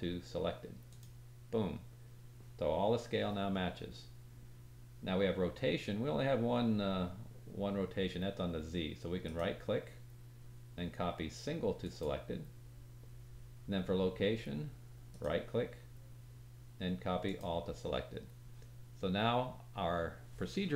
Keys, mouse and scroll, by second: 9.2 right click, 15.1 right click.